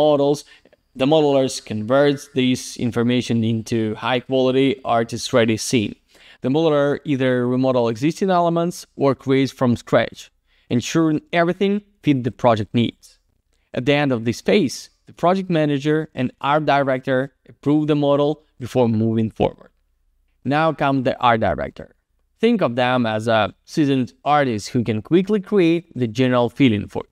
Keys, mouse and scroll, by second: 2.1 click, 4.2 click, 4.3 click, 5.0 click, 5.1 click, 5.6 click, 5.8 click, 6.3 click, 6.4 click, 7.0 scroll down 1, 7.4 middle click, 8.1 alt+z, 8.3 click, 8.7 alt+middle click, 10.8 alt+z, 11.6 alt+middle click, 13.1 alt+z, 13.3 click, 14.4 alt+middle click, 14.9 middle click, 15.7 alt+z, 15.9 click, 18.9 click, 18.9 click.